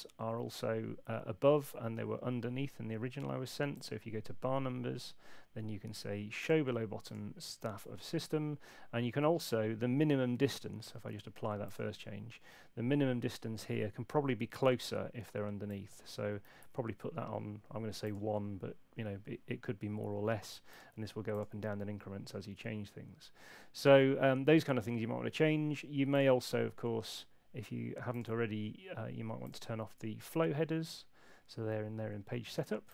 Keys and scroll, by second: 16.4 1.